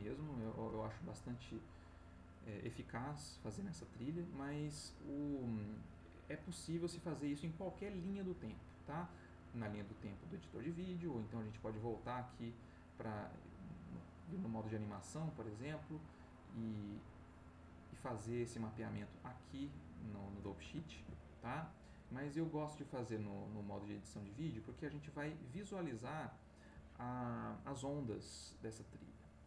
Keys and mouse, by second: 0.7 middle click, 1.6 middle click, 11.4 click, 13.9 click, 16.4 middle click, 17.4 click, 20.9 ctrl+s, 22.7 click.